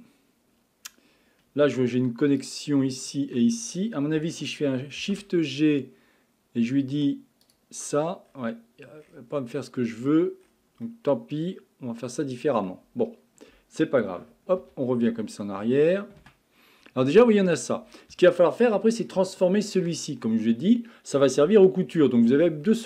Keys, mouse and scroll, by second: 2.4 click, 3.0 shift+click, 5.0 shift+g, 8.3-9.9 scroll down 20, 9.9-10.4 scroll up 9, 10.6 scroll down 3, 10.8-13.9 middle drag, 14.6 ctrl+z, 15.1 ctrl+z, 16.6-17.4 scroll up 7, 17.4-18.3 scroll down 11, 18.3 shift+middle click, 18.9-19.3 scroll up 3, 19.3-22.4 shift+middle drag.